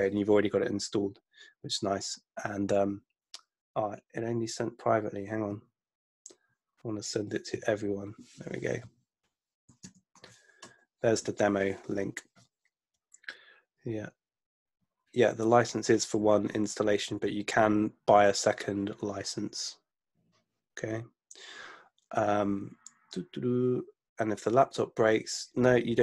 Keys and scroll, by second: 9.9 super+v, 10.7 Return.